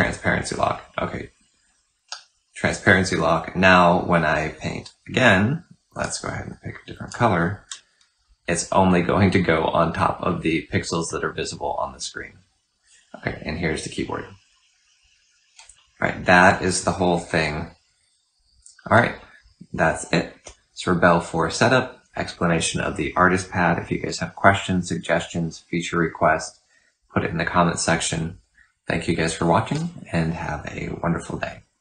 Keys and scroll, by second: 1.9 typing, 5.8 F6.